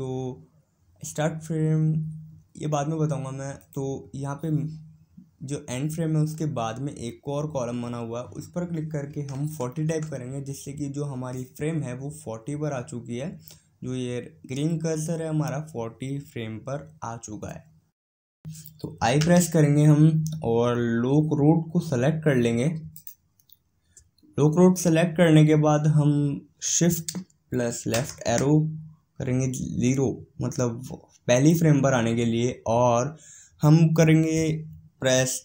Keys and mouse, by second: 4.1-27.8 drag, 27.8 shift+Left.